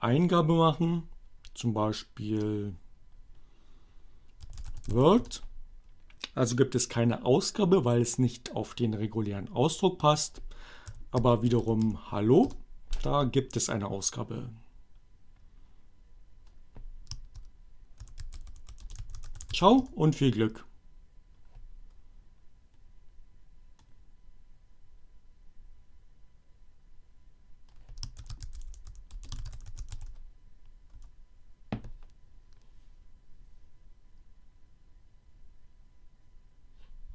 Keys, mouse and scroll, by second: 3.0-4.9 typing, 5.3 Return, 10.6-11.7 typing, 11.9 Return, 16.2 h, 17.9-20.1 typing, 26.4 shift+h, 28.3-30.5 typing, 31.0 Return.